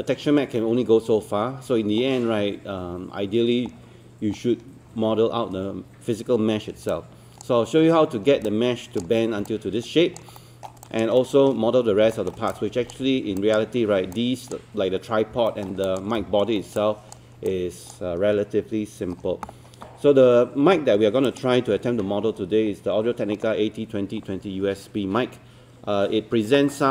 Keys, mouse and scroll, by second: 0.7 scroll up 1, 3.8-4.3 scroll down 1, 4.3-6.8 scroll up 1, 6.9 alt+click, 8.2 scroll down 1, 8.5 alt+click, 9.5 alt+click, 10.4 alt+middle click, 10.8 alt+click, 11.2 alt+middle click, 12.2 alt+middle click, 12.5 alt+click, 13.4 alt+click, 14.2 alt+click, 15.5 alt+middle click, 15.8 alt+click, 16.2 alt+middle click, 16.6 scroll down 1, 16.8 alt+click, 17.5 alt+click, 21.3 click.